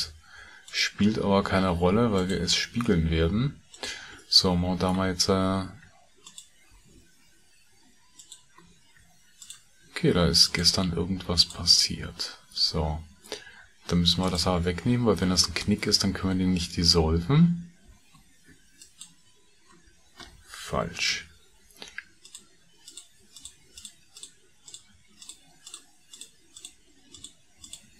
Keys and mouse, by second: 2.0 shift+click, 3.6 shift+click, 6.2 shift+click, 8.0 ctrl+click, 9.2 shift+click, 10.4 shift+click, 11.4 shift+click, 14.6 shift+middle click, 18.6 ctrl+shift+click, 20.8 ctrl+z, 22.1 shift+click, 22.9 shift+click, 23.4 middle click, 23.8-25.3 middle drag, 25.7 shift+middle click, 26.2 shift+click, 26.6 shift+click, 27.2 shift+click, 27.6 shift+click.